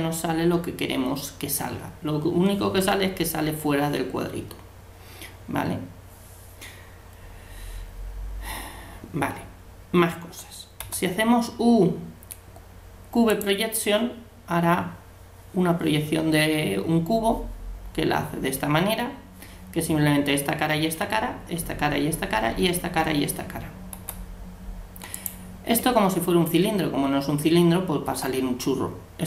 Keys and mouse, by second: 10.8 u, 23.9 u, 28.0 u.